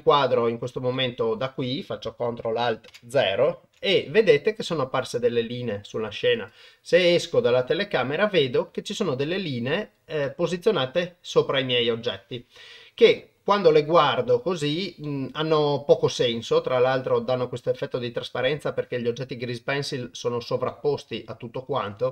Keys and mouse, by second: 0.0 middle drag, 0.9 middle click, 2.9 ctrl+alt+KP_0, 6.3 click, 6.9-10.0 middle drag, 10.2-13.1 middle drag, 13.7-14.4 middle drag, 15.0-17.2 middle drag, 17.7-18.3 middle drag, 20.7 drag, 20.9-21.8 middle drag.